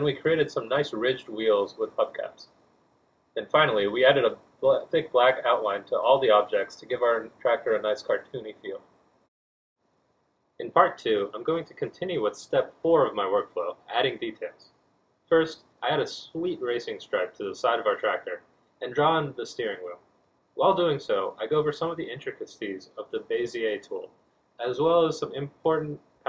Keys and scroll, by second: 0.0-0.5 typing, 4.1 z, 8.2 g.